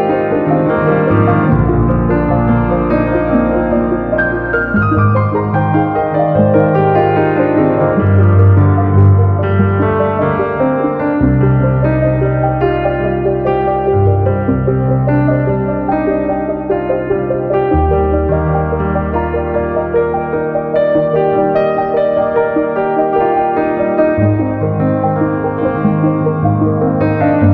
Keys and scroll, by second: 3.1 Page_Down.